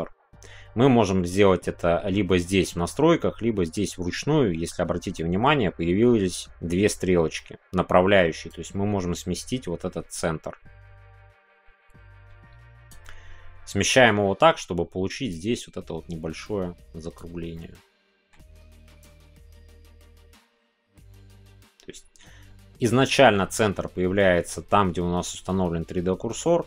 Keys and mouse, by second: 7.3 middle click, 13.0-17.1 middle drag, 17.1 click, 17.5-26.6 middle drag.